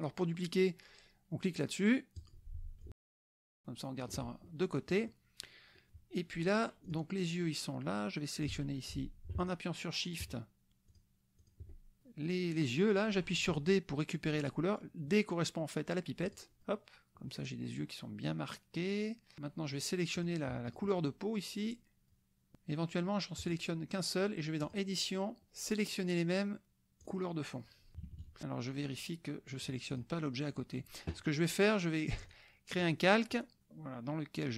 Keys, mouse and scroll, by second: 2.2 click, 2.8-4.2 ctrl+drag, 4.5 ctrl+click, 5.8 click, 6.8 click, 8.4 click, 9.4 shift+click, 10.9 shift+click, 11.4 shift+click, 16.2 click, 16.6 click, 17.3 click, 20.2 click, 20.7 shift+click, 22.1 shift+click, 23.4 click, 24.6 click, 27.1 click, 27.9 KP_Subtract, 29.6 click, 30.6 click, 32.3 click, 32.8 click.